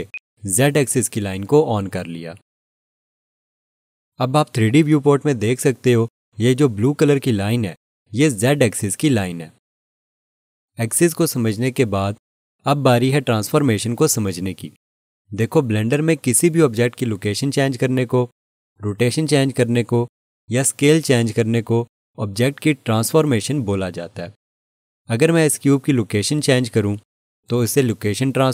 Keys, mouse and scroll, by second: 0.1 click.